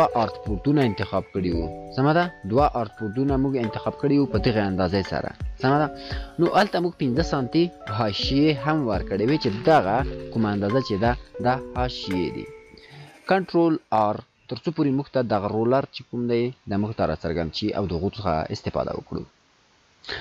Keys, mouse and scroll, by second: 19.3 click.